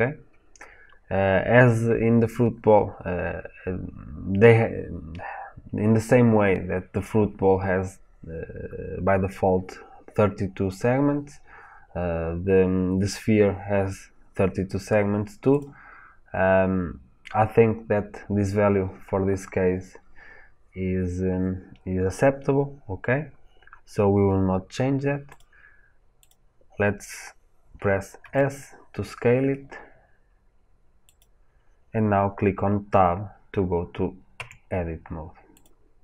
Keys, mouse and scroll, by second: 15.4-25.3 drag, 25.3 middle click, 26.1 click, 28.1 s, 31.1 click, 34.2 Tab, 35.4 click.